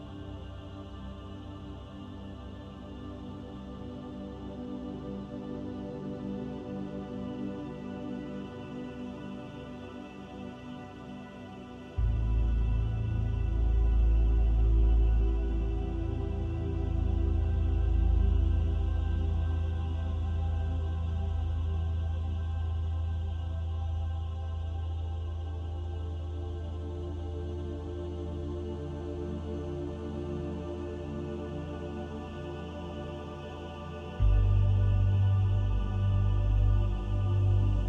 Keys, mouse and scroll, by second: 1.5 click, 1.9 middle click, 2.6 shift+middle click, 3.2 middle click, 7.2 click, 9.1 click, 13.8 click, 16.8 click, 20.1 middle click, 25.1 click, 27.6 middle click, 31.3 ctrl+z, 33.2 click, 33.9 click, 37.2 middle click.